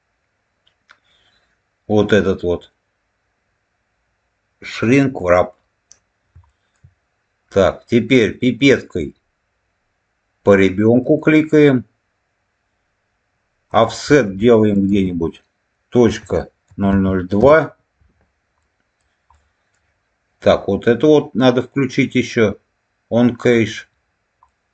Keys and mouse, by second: 6.4 shift+middle click, 13.6-18.0 drag, 18.5 middle click, 19.2 middle click, 23.4 click, 24.4 middle click.